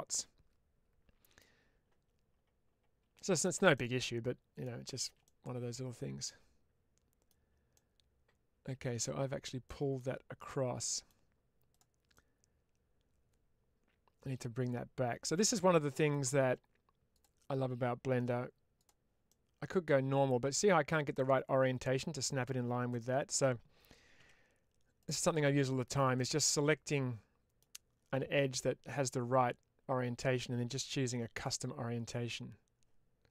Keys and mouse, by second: 0.0-1.2 middle drag, 3.0 shift+middle click, 3.6 middle click, 5.1 middle click, 6.1-7.1 middle drag, 7.6-8.9 middle drag, 9.5 middle click, 10.3 click, 10.7 middle click, 12.0-16.0 middle drag, 19.2-20.5 middle drag, 21.0 middle click, 22.8 middle click, 24.1 2, 24.9 click, 25.5 middle click, 26.0-27.5 middle drag, 33.2-33.3 middle drag.